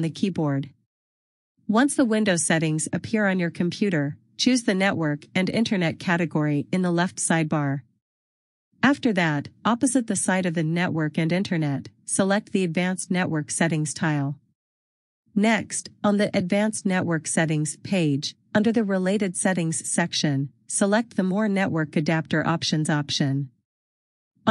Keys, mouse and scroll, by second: 12.7 click, 19.4 click, 23.5-24.5 scroll.